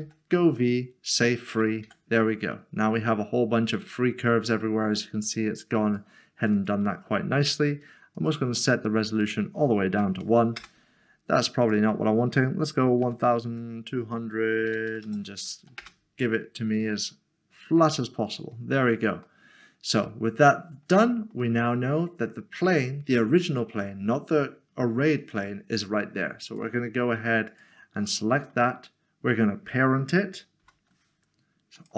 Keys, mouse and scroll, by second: 0.7 click, 1.8 click, 5.9 click, 10.6 Return, 11.6 click, 13.0-13.5 typing, 14.6-15.0 typing, 15.8 Return, 18.0 middle click, 21.9 scroll up 1, 26.5 click, 27.5 shift+click, 28.4 middle click, 31.8 ctrl+p.